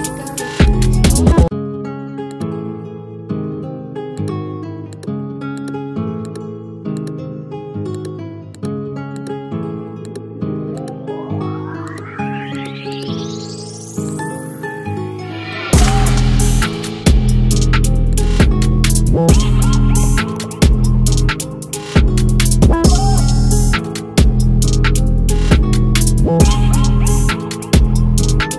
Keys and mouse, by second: 1.0-4.1 alt+drag.